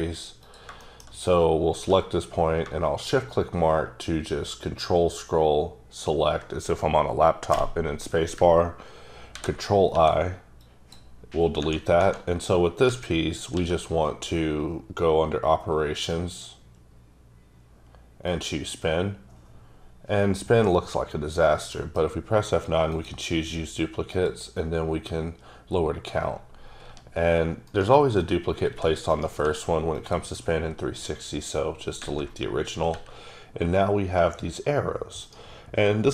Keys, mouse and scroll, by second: 0.4 click, 0.8 shift+middle click, 1.8 q, 3.0 shift+click, 4.2-5.5 ctrl+scroll up 9, 5.9-6.4 ctrl+scroll up 1, 9.2 ctrl+i, 9.9 x, 10.6 click, 12.8 a, 13.5 q, 16.1 click, 18.3 click, 22.4 F9, 24.1 click, 26.0-26.8 scroll down 1, 26.8 g, 27.6 right click, 28.7 g, 29.1 right click, 29.4 x, 29.9 click, 32.9 r, 35.2 right click.